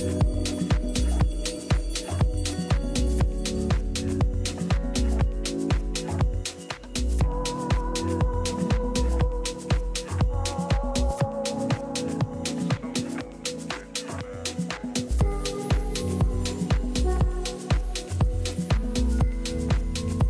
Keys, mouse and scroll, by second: 0.8 b, 3.1-4.7 drag, 5.4 a, 6.3-8.1 middle drag, 6.9 a, 7.2 a, 8.1 b, 11.2-13.0 drag, 13.1 a, 13.5-16.7 middle drag, 15.3 a, 15.5 a, 16.7 b, 19.5-20.2 drag.